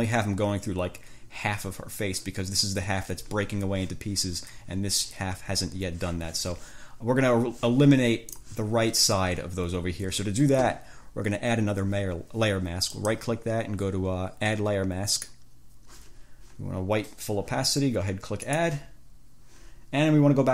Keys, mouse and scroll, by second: 8.5 click, 13.1 click, 15.3 click, 18.7 click.